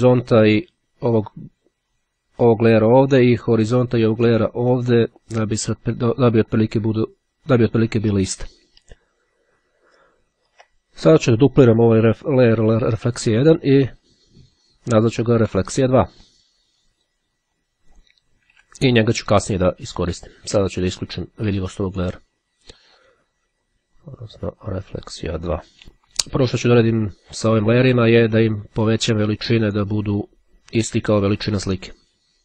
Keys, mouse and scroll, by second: 9.5-10.0 ctrl+scroll up 2, 10.1-10.9 ctrl+scroll down 3, 11.4 click, 14.1-15.2 drag, 15.5 click, 16.6-17.6 drag, 17.7 2, 20.1 click, 21.0 click, 22.9 click, 23.9 click, 25.5 2, 25.6 Return, 28.7 click, 29.7 right click.